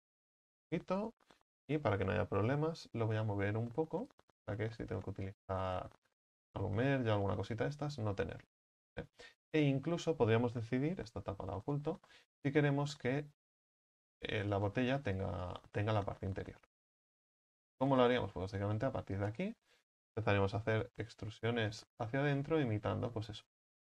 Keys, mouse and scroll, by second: 1.1 right click, 1.5 l, 2.5 KP_1, 4.1-5.3 drag, 5.3 middle click, 6.0 z, 6.8 z, 7.4 middle click, 7.7 Tab, 8.1-9.0 scroll down 2, 9.0 right click, 9.3 scroll down 2, 9.5 Tab, 9.8-11.1 scroll up 4, 11.1 h, 11.7 right click, 12.1-13.7 middle drag, 13.7 click, 14.5 right click, 15.1 alt+shift+right click, 15.4 alt+shift+right click, 16.4-17.5 scroll up 4, 17.5 x, 19.2 c, 19.6-20.1 scroll down 5, 20.1 shift+middle click, 20.7 e, 21.7-23.4 drag, 23.4 z.